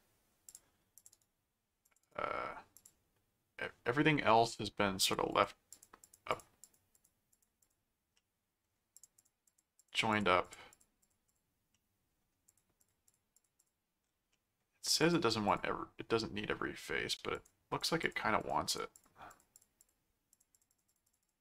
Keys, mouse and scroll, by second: 0.5 click, 1.1 right click, 1.8 click, 2.0 right click, 2.7 click, 5.0-8.1 drag, 8.1 middle click, 9.0-11.8 drag, 11.7 middle click, 12.5-14.1 drag, 14.3 middle click, 15.0 click, 17.3-21.4 drag.